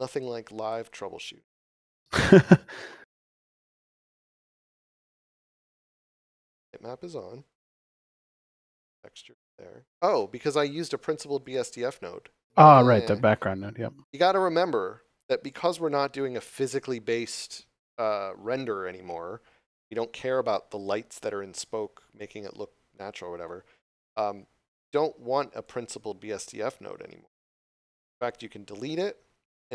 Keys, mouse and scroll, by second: 6.0 scroll up 1, 8.3 scroll up 1, 11.4 click, 23.9 scroll down 1, 25.6 click.